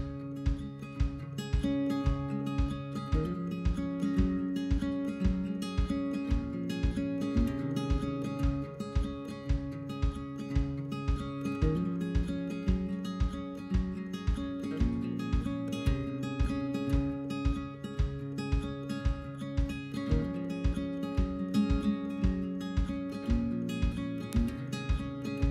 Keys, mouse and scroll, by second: 0.0-0.5 drag, 0.5-1.5 middle drag, 1.5-2.6 scroll up 4, 1.7 shift+middle drag, 2.0 shift+middle click, 2.6 shift+middle click, 3.2-3.6 scroll up 1, 3.6 ctrl+r, 5.1 ctrl+r, 6.4 middle click, 6.7 scroll down 2, 6.8 click, 7.2 click, 7.3 middle drag, 7.5 scroll down 1, 7.6-9.2 shift+middle drag, 9.2 alt+click, 9.5-10.4 middle drag, 10.4 shift+click, 10.7 shift+click, 10.8-11.5 middle drag, 11.5-12.0 scroll up 3, 12.0-12.8 shift+middle drag, 12.8 shift+click, 13.1 shift+click, 14.5-15.1 right drag, 15.1 alt+click, 16.1 alt+shift+click, 16.5 alt+shift+click, 17.3-17.6 right drag, 17.6 click, 19.5 scroll down 4, 19.7-20.0 middle drag, 20.0 scroll up 4, 20.3 scroll down 1, 20.5-20.9 shift+middle drag, 20.9 scroll up 1, 21.0-21.5 middle drag, 21.5 alt+click, 21.9-22.5 middle drag, 22.5 alt+shift+click, 22.9 alt+shift+click, 23.0-23.7 middle drag, 23.7 alt+shift+click, 24.1 right drag, 24.3 click, 24.4-24.9 middle drag, 24.9 scroll down 1, 25.1-25.5 shift+middle drag.